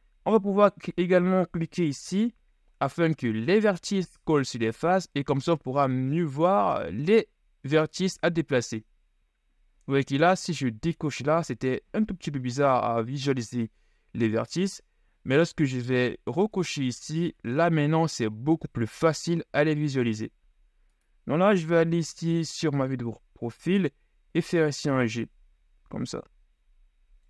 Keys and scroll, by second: 21.9 KP_3, 23.2 z, 24.4 g.